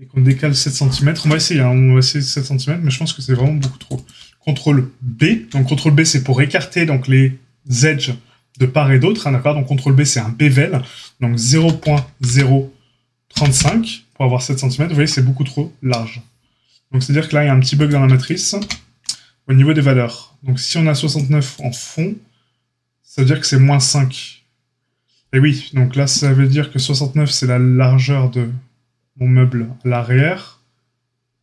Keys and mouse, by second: 3.1 ctrl+r, 5.1 ctrl+b, 18.5 ctrl+z.